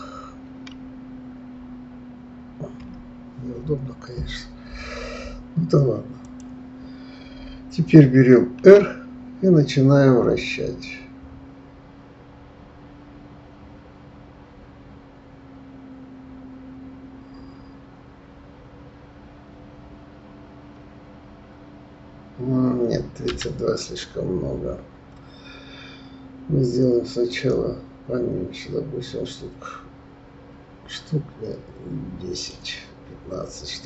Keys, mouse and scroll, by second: 0.7 KP_3, 2.8 KP_1, 6.2 click, 8.6 r, 27.3-30.3 drag.